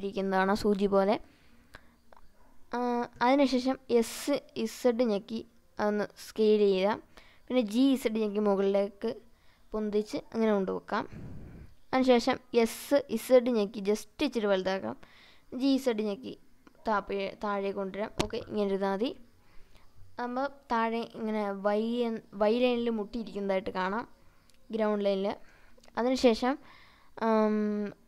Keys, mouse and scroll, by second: 2.4 s, 2.6 z, 3.8 click, 5.3 g, 5.9 z, 8.7 click, 11.3 s, 12.5 z, 14.9 click, 15.7 g, 16.0 z, 17.5 click, 19.7 click, 27.1 drag.